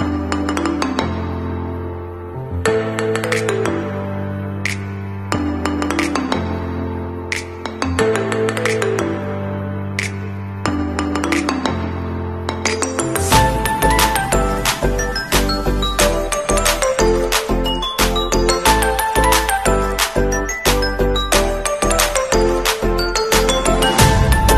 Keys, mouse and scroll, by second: 1.7 alt+scroll down 1, 2.3 scroll down 1, 7.8 click, 8.4 scroll up 1, 10.2 alt+scroll down 1, 17.4 scroll down 1, 20.9 alt+click, 23.2 click, 24.2 alt+scroll up 1.